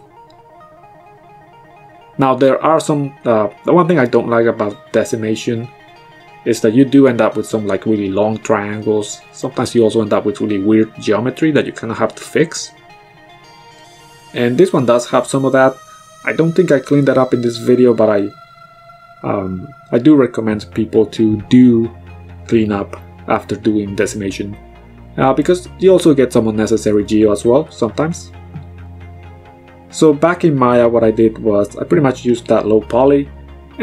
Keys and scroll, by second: 4.2 ctrl+z, 6.1 BackSpace, 15.4 KP_3, 15.7 Return, 25.5 ctrl+z, 27.0 KP_4, 27.1 Return.